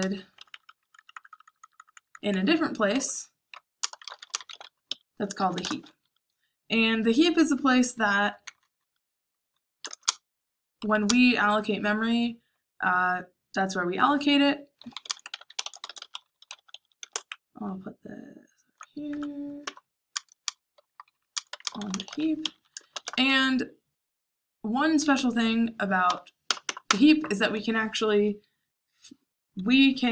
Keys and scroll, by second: 0.8-11.4 typing, 14.5-16.4 typing, 17.8-22.9 typing, 18.7 Tab, 26.0 o, 26.4 BackSpace, 26.6 BackSpace, 26.8 BackSpace.